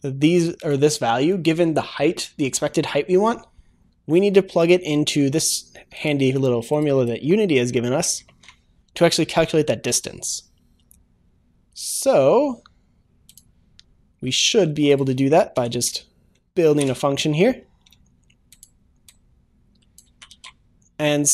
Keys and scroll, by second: 16.2 ctrl+., 20.2 ctrl+v, 20.3 ctrl+s.